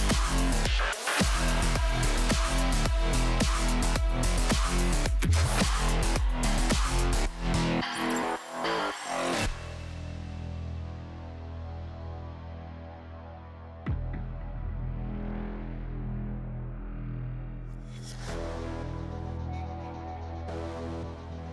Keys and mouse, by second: 1.1 Tab, 1.9 s, 3.5 click, 3.8-7.9 typing, 9.3 z, 9.4 z, 11.6 g, 12.6 z, 12.6 z, 13.6 click, 14.0 s, 16.0 s, 16.2 click, 17.9 s, 18.8 s, 18.9 s, 19.2 g, 20.3-21.5 typing.